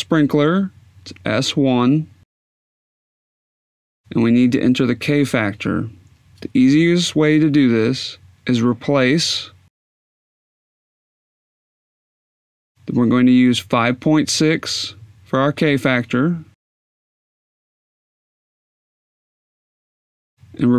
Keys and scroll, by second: 1.2 1, 2.3 Tab, 18.1-19.5 typing.